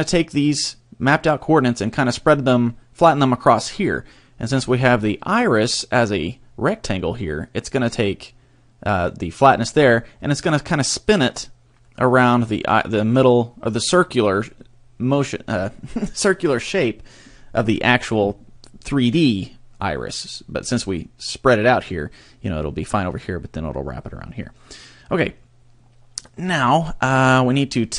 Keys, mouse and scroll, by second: 11.8 middle click, 26.6 middle click.